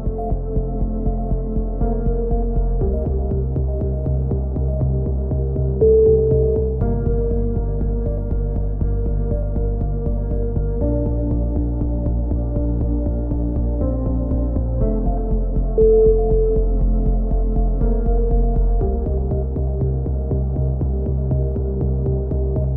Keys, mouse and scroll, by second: 0.9 middle click, 3.0 middle click, 3.8 click, 4.1-5.4 right drag, 5.4-7.0 drag, 7.8 a, 8.0 middle click, 8.3 click, 8.7 click, 8.9 click, 11.7-13.1 drag, 17.2 click, 17.8 KP_3, 18.2 z, 18.5 z, 19.2 click, 19.5 z, 20.1-21.5 middle drag, 21.5 click, 21.5 z, 22.2 click, 22.5-22.7 middle drag.